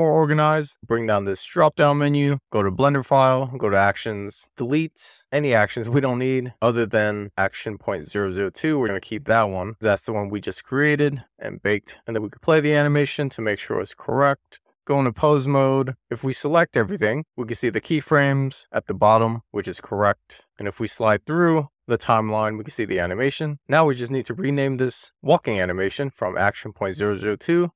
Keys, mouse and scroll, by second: 0.7-2.3 drag, 2.9 click, 3.9 click, 4.7 x, 5.4 BackSpace, 5.8-7.0 right drag, 7.0 click, 7.2-8.1 right drag, 8.1 click, 10.8-11.9 drag, 14.0 click, 14.5 click, 15.0 click, 16.4 a, 18.8-19.9 middle drag, 21.0-23.4 drag, 23.4 a, 23.7-27.7 drag, 26.2 BackSpace.